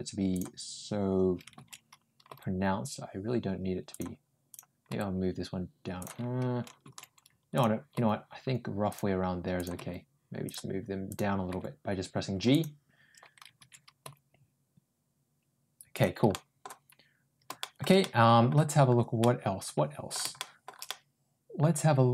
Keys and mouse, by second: 2.1 ctrl+g, 4.4 click, 4.7 ctrl+g, 7.8 ctrl+g, 9.4 click, 9.6 ctrl+g, 11.0 click, 11.4 g, 13.9 ctrl+g, 16.1 middle click, 17.4 middle click, 17.8 middle click, 19.0 middle click, 20.2 shift+middle click, 20.7-22.1 middle drag.